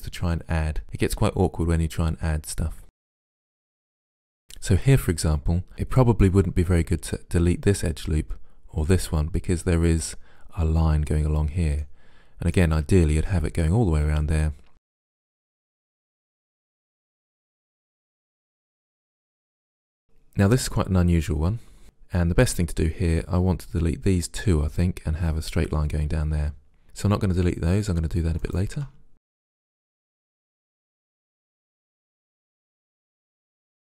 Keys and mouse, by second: 0.6 middle click, 1.1 right click, 1.9 right click, 1.9 middle click, 2.4 right click, 2.6 middle click, 2.7 click, 2.9 middle click, 3.3 ctrl+z, 4.1 Delete, 11.9-13.8 middle drag, 14.7 middle click, 15.3 middle click, 15.9 right click, 16.2 Delete, 17.7 right click, 18.1 middle click, 18.2 Delete, 18.8 right click, 19.9-28.4 middle drag, 28.4 right click, 29.1 middle click, 29.5 Delete, 30.2 middle click, 30.8 middle click, 31.5 Delete, 31.9 middle click, 32.3 click, 32.8 middle click, 33.1 click, 33.5 middle click.